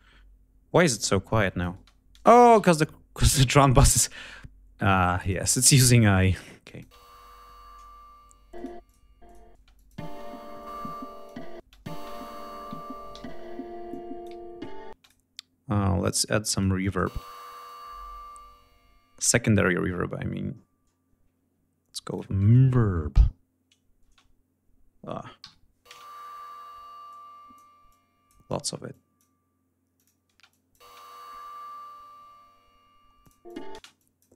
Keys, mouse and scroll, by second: 0.5 click, 1.1 click, 1.5 space, 3.3 click, 4.9 click, 5.9 click, 6.4-6.7 drag, 6.6 space, 8.3 click, 9.0 click, 9.3 space, 9.5 click, 10.3 click, 11.3 space, 11.4 click, 12.0 ctrl+scroll down 2, 12.9 g, 13.6 click, 14.1 ctrl+scroll down 1, 14.6 ctrl+space, 14.7 ctrl+click, 16.3 click, 16.8 space, 17.3 right click, 19.2-19.5 scroll down 2, 20.2-20.8 scroll down 2, 21.8 click, 23.1 l, 23.7 space, 25.1 Home, 25.6 space, 26.8 click, 27.6 click, 28.6 click, 29.7 click, 30.4 space, 33.0 click, 33.5 space, 33.7 click, 34.2 space.